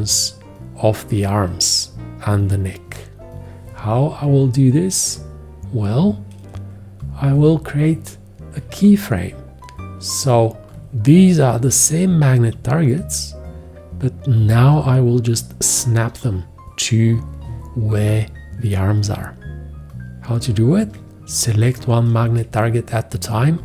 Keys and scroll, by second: 7.3 x, 8.5 x.